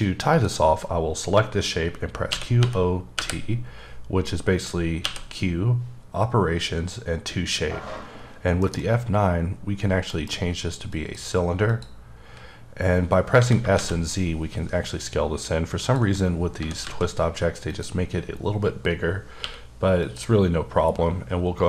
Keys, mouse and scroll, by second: 0.3 click, 2.3 q, 2.6 o, 3.2 t, 5.0 q, 8.6 alt+m, 10.1 F9, 10.9 click, 11.7 click, 13.4 s, 13.9 z, 15.8 click, 16.6 s, 16.8 z, 17.7 click, 19.4 q, 20.0 click.